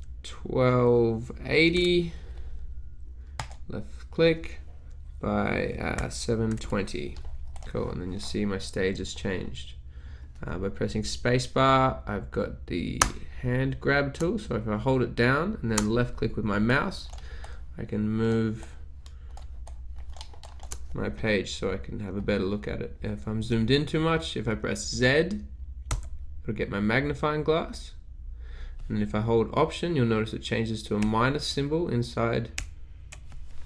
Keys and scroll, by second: 0.0-0.2 typing, 1.5-2.4 typing, 3.9 typing, 6.1-7.1 typing, 12.9 space, 13.6 space, 14.0 space, 15.7-20.6 typing, 26.0 z.